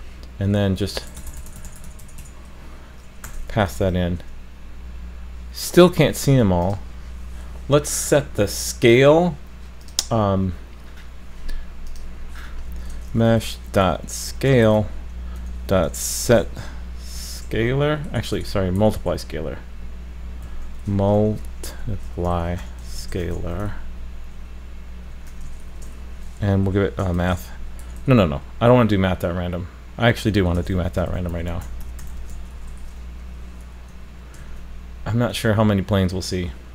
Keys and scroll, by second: 3.7 super+s, 34.4 super+s.